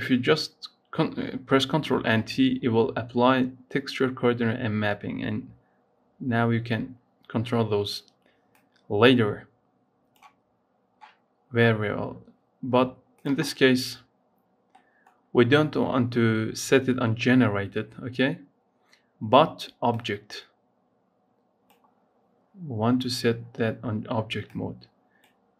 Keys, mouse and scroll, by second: 1.7 ctrl+t, 4.6-7.0 scroll up 1, 7.0-21.4 scroll down 4, 21.4 click, 22.1-23.0 scroll down 2, 23.0-24.4 scroll up 5, 24.4-25.5 drag.